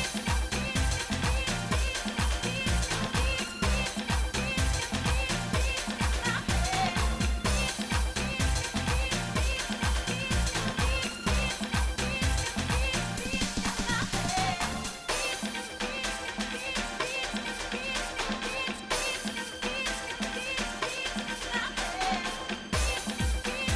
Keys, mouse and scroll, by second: 0.9 shift+middle click, 1.7 shift+middle click, 2.2 shift+middle click, 2.6 shift+middle click, 2.9 shift+middle click, 4.1 scroll down 1, 4.7 shift+middle click, 7.1 ctrl+z, 7.6 ctrl+z, 9.8 ctrl+z, 11.0 shift+middle click, 11.5 click, 12.8 shift+middle click, 14.3 scroll up 1, 15.4 shift+middle click, 16.1 middle click, 17.4 shift+middle click, 19.0-20.0 shift+middle drag, 21.7 middle click, 22.3 shift+middle click.